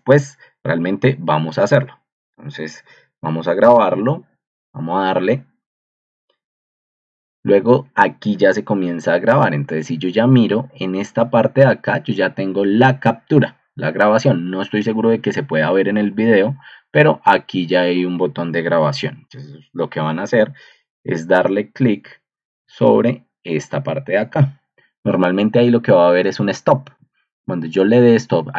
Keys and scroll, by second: 2.3 Escape, 3.6 super+g, 8.7 ctrl+2.